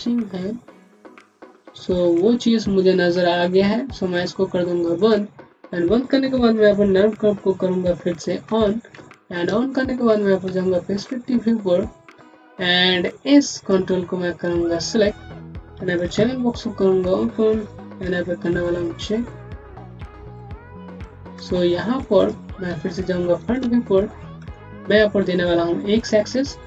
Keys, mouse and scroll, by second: 4.8 click, 5.2-6.5 scroll up 1, 8.3 alt+1, 8.8-9.4 scroll down 1, 9.4 space, 9.5 click, 9.9 space, 10.7 scroll up 1, 11.1 alt+middle click, 11.5-11.9 scroll up 1, 13.4 click, 14.0-15.6 scroll down 1, 16.0 alt+c, 18.1-19.7 typing, 22.1 click, 23.1 space, 24.0-24.4 scroll down 2, 24.3 alt+middle click, 24.5 click.